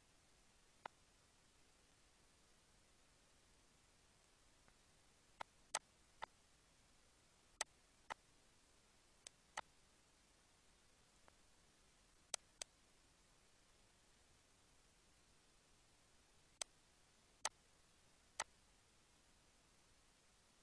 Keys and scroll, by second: 10.2 -, 16.1 ctrl+d.